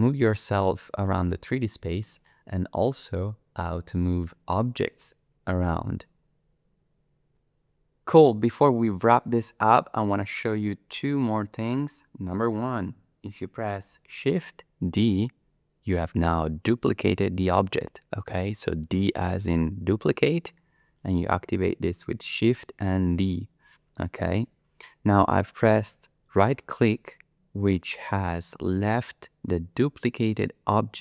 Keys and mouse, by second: 14.9 shift+d, 21.0 click.